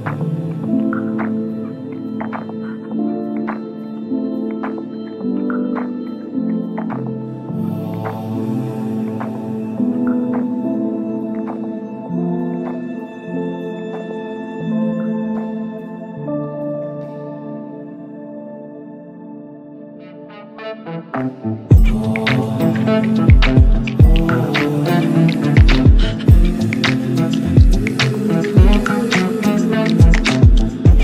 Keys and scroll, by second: 5.3 c, 11.0 c, 11.3 e.